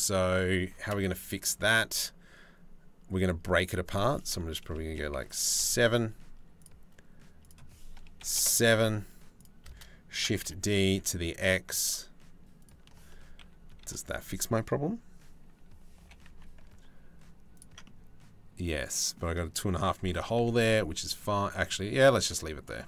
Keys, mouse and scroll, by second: 3.6-5.3 drag, 7.1 click, 9.0 shift+click, 9.8 shift+d, 13.0 KP_3, 13.4 KP_1, 15.6 g, 17.5-18.8 drag, 19.8 g, 22.3 middle click.